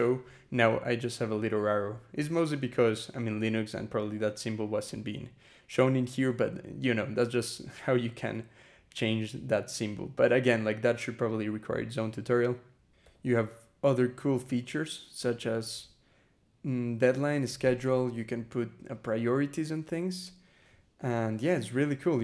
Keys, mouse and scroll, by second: 3.4 scroll up 2, 4.8 scroll down 2, 12.8 e, 13.5 BackSpace, 14.3 Return, 15.0 /, 15.7-16.0 scroll down 2, 17.4 scroll down 2, 18.3-19.1 scroll down 4, 19.3 scroll down 2, 19.7-20.0 scroll up 2, 20.6-21.3 scroll down 4, 21.8 scroll down 2.